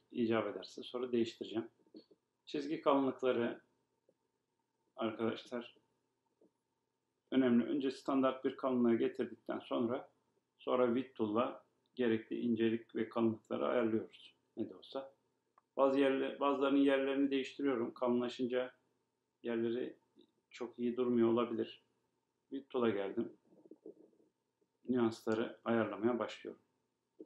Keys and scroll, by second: 13.5 Right, 16.2 Up.